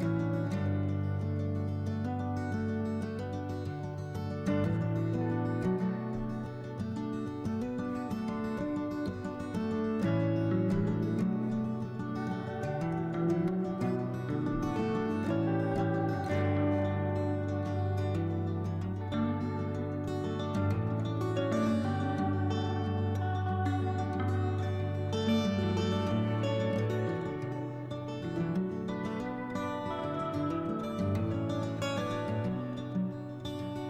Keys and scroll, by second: 18.6 s, 24.7 s, 30.6-31.6 typing.